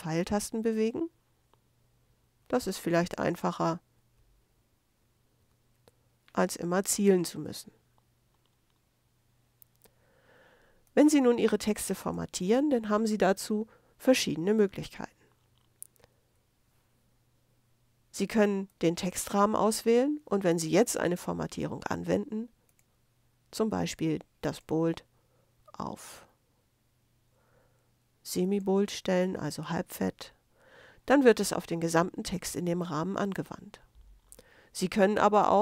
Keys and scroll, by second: 0.4 super+Left, 0.5 super+v, 1.0 super+Left, 2.1 super+Left, 2.2 super+v, 2.7 super+Left, 3.9 super+Left, 4.0 super+v, 4.6 super+Left, 5.4 super+Left, 5.5 super+v.